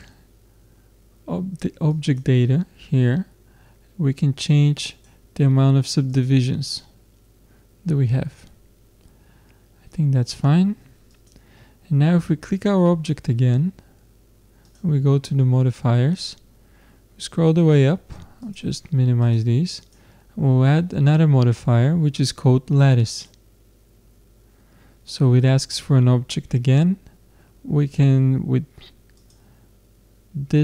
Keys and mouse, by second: 1.9-3.8 drag, 4.9-8.5 drag, 11.1-13.4 drag, 14.6-16.1 drag, 16.1-18.4 middle drag, 18.4-21.7 drag, 29.2-30.6 drag.